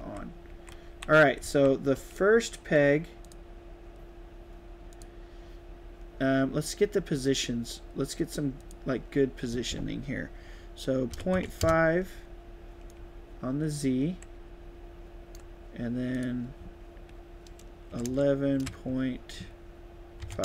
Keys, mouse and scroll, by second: 0.8-2.4 typing, 1.9 click, 3.2 click, 4.9 click, 8.5 click, 12.8-15.3 right drag, 12.9 a, 14.3 d, 16.1 click.